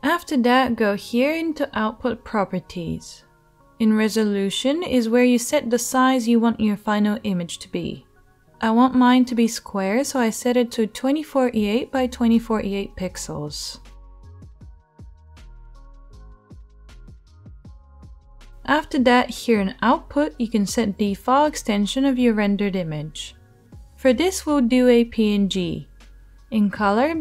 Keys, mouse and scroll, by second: 0.0 click, 0.0 middle click, 0.0-27.2 right drag, 6.8-14.3 drag, 6.8-14.3 middle drag, 14.7-27.2 drag, 14.7-27.2 middle drag.